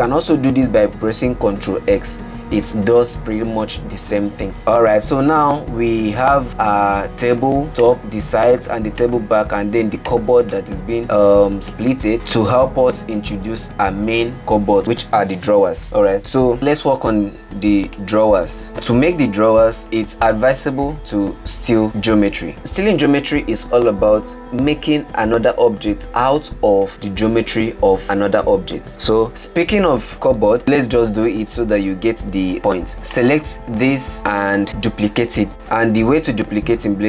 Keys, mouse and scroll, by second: 2.2 ctrl+x, 4.7 Tab, 5.5-6.9 middle drag, 6.9 scroll down 6, 7.4-8.0 middle drag, 8.0 click, 9.5 click, 10.5 click, 11.0-12.4 middle drag, 12.4-14.2 scroll up 8, 14.2 middle click, 18.1-18.7 scroll down 3, 18.7 right click, 20.1-22.6 middle drag, 30.6 click, 31.9-33.5 drag.